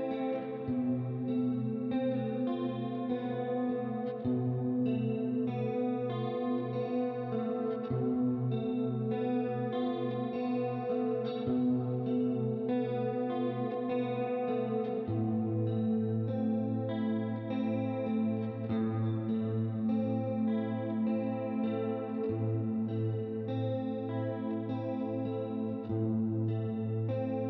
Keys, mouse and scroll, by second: 0.8 middle click, 1.7 click, 3.2 click, 3.7 right click, 5.7 click, 8.2 click, 9.1 click, 10.8 click, 11.7 KP_1, 11.8 KP_0, 12.0 Return, 13.3 click, 14.8 middle click, 15.7 middle click, 17.1 click, 18.3 click, 19.1 middle click, 20.2 middle click, 21.6 click, 22.4 middle click.